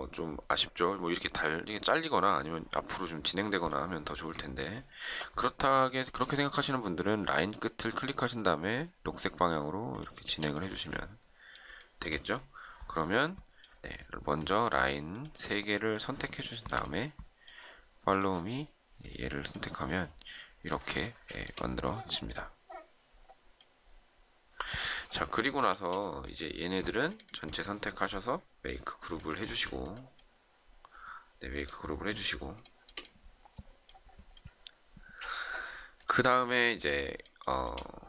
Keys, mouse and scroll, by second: 4.8 ctrl+z, 10.2 space, 11.7 shift+middle click, 15.0 shift+click, 15.7 shift+click, 16.3 shift+middle click, 21.0 shift+middle click, 25.3 shift+middle click, 25.7 space, 32.6 shift+middle click, 36.3 shift+middle click, 37.4 shift+middle click.